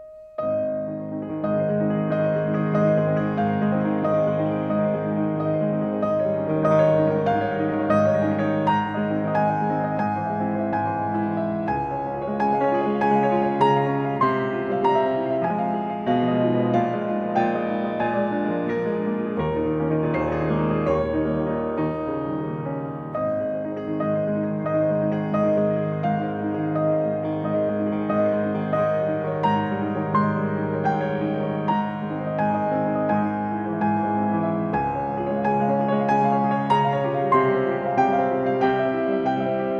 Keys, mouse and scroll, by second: 0.2 e, 0.4 scroll up 2, 0.6 scroll down 2, 0.6 middle click, 0.8-1.9 scroll up 8, 1.0 middle click, 2.1 Escape, 3.2 Escape, 3.2-3.7 scroll up 3, 3.3 v, 4.2 scroll down 2, 4.8 scroll down 2, 5.0 scroll up 2, 5.2 t, 5.3 ctrl+z, 5.3 scroll down 2, 6.1 Escape, 6.2 z, 7.1 2, 7.4-7.8 scroll up 4, 7.9 scroll down 2, 8.1 scroll up 2, 9.2 v, 17.9-21.1 middle drag, 21.1-23.2 drag, 23.3 scroll down 2, 23.4-23.7 scroll up 2, 24.3-25.7 typing, 24.6 click, 25.0 middle click, 25.4 scroll up 2, 25.5 scroll down 2, 25.6-26.1 scroll up 2, 27.9 middle click, 28.5 scroll down 2, 28.7-29.3 scroll up 2, 29.3-29.6 scroll down 2, 29.6-30.4 scroll up 2, 33.8 scroll down 2, 33.8 scroll up 2, 34.3 scroll down 2, 34.4-34.8 scroll up 1, 35.2-35.9 scroll down 2, 36.7 1, 37.5 2, 38.1 1, 38.7-39.2 scroll down 1.